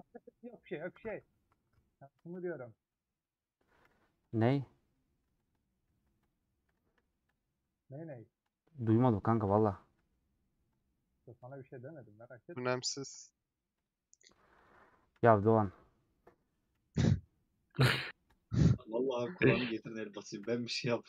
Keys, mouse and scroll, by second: 0.2-2.5 middle drag, 2.7-8.6 drag, 9.9 h, 11.5 click, 12.8 h, 13.9 click, 15.1 h, 17.7 middle click, 18.0 h, 18.2 click, 20.4 h.